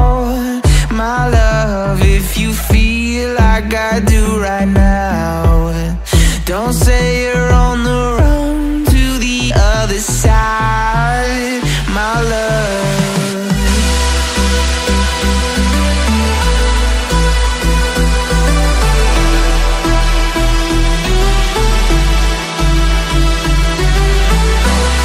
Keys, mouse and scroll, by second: 0.6 KP_3, 4.2 shift+a, 9.4 KP_1, 10.7-11.9 drag, 11.9-12.5 scroll up 5, 12.5-13.0 shift+middle drag, 13.0-13.4 scroll up 5, 14.5-14.9 shift+middle drag, 14.9-15.3 scroll up 2, 17.7 Tab, 19.0 ctrl+r.